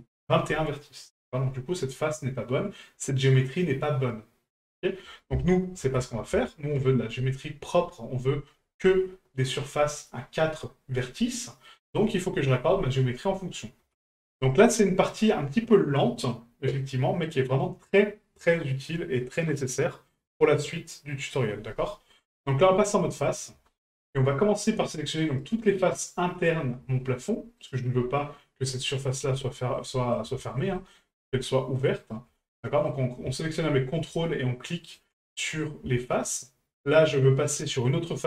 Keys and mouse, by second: 11.7-12.1 middle drag, 23.2 click, 23.7 shift+middle drag, 25.3 right click, 27.6 ctrl+right click, 29.5-29.8 shift+middle drag, 30.0 middle drag, 30.4 shift+middle drag, 30.8 middle drag, 32.0 ctrl+right click, 32.5-32.9 middle drag, 34.8 ctrl+right click, 35.3 middle drag.